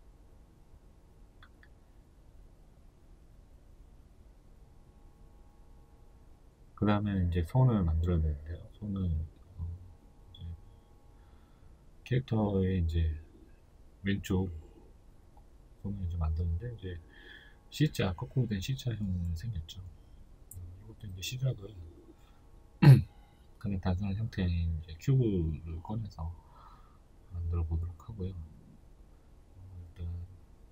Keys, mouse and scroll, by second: 1.9-3.8 scroll up 2, 3.8-4.8 scroll down 2, 4.8-7.2 scroll up 2, 7.2-8.4 scroll up 1, 8.6-9.0 scroll up 2, 9.8 right click, 10.1 right click, 10.6 Tab, 11.2 right click, 11.5 alt+right click, 15.6 shift+s, 16.3 Tab, 17.1-22.0 shift+middle drag, 17.3 scroll up 2, 17.6 scroll down 1, 18.4-19.9 scroll up 1, 21.1 s, 22.1 click, 22.5 g, 24.1 click, 24.7 s, 26.2 click, 26.4 g, 29.4-30.7 shift+middle drag.